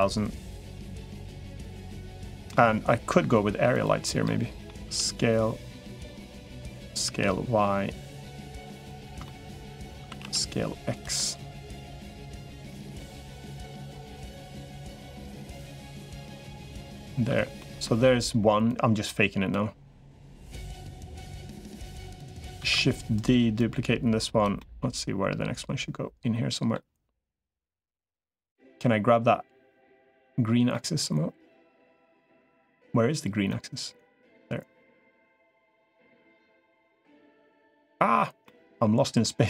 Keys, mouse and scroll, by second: 0.6-2.3 middle drag, 3.5 click, 4.1 middle click, 4.7 s, 6.5 s, 8.6 middle click, 9.1 shift+middle click, 9.9 s, 11.0-13.3 middle drag, 13.5 middle click, 15.3-16.3 drag, 16.4 middle click, 17.4 middle click, 18.5 click, 20.3 click, 21.2 middle click, 22.7 shift+d, 23.5 click, 24.4-26.6 middle drag, 27.5-30.1 middle drag, 30.5-32.0 middle drag, 33.3 middle click, 35.3-36.5 drag, 36.5-37.8 middle drag, 38.3 middle click, 39.0 middle click.